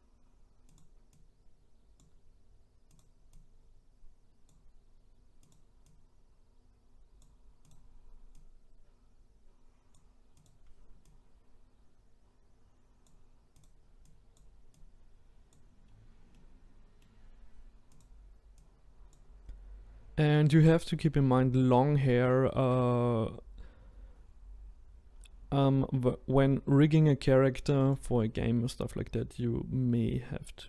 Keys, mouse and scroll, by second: 1.2 click, 3.0 click, 5.5 click, 5.9 click, 7.7 click, 8.4 click, 10.4 click, 11.1 click, 14.4 click, 14.8 click, 15.9-16.3 scroll down 2, 16.3-18.0 middle drag, 18.0 click, 18.7 click, 26.4-26.7 scroll up 2, 27.9 click.